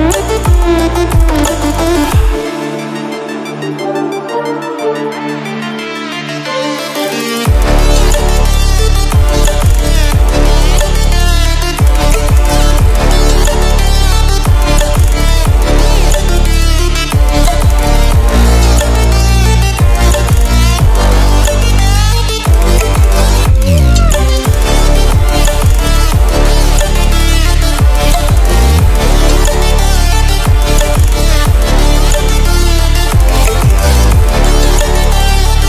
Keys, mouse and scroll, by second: 0.8-2.6 drag, 3.0 ctrl+alt+scroll up 1, 4.1-4.9 alt+drag, 6.4 ctrl+a, 11.2 click, 14.4-15.4 click, 16.7 click, 18.7 ctrl+a, 20.0-20.9 typing, 22.5 BackSpace, 23.7 Caps_Lock, 24.3-24.7 typing, 25.8-27.8 typing, 29.3-30.5 typing, 31.8-33.5 typing, 34.8-35.6 typing.